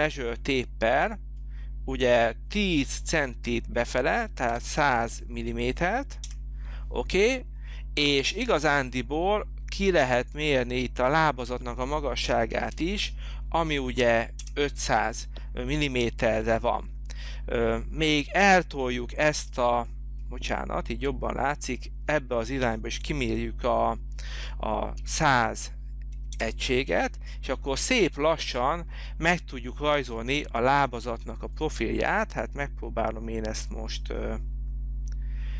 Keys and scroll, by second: 4.2 1, 4.5 0, 12.2 5, 12.5 0, 14.4 Return, 24.7-25.6 typing, 26.3 Return.